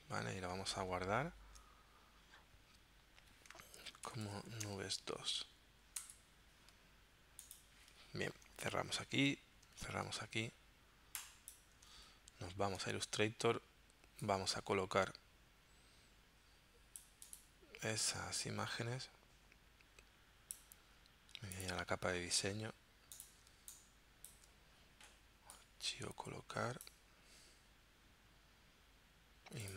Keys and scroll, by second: 1.1 shift+super+s, 3.5-5.3 typing, 6.0 Return, 8.7 super+w, 9.8 super+w, 12.0 super+Tab, 22.4 z, 23.5 space.